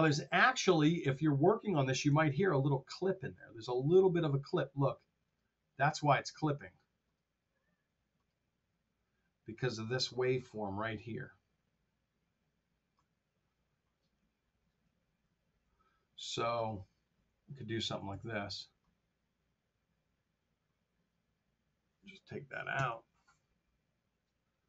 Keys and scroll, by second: 2.0 t, 5.6 t, 14.1 t, 14.7 r, 15.5 t, 18.0 alt+2, 22.8 BackSpace.